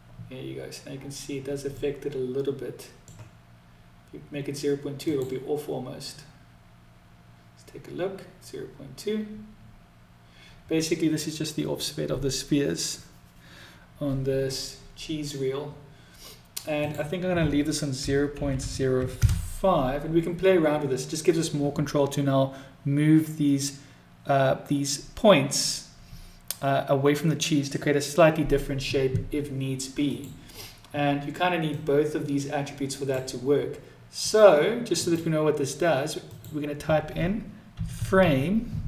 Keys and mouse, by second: 1.1-2.4 middle drag, 16.1-20.7 drag, 29.4 click, 31.1-32.5 drag, 34.3-38.8 drag.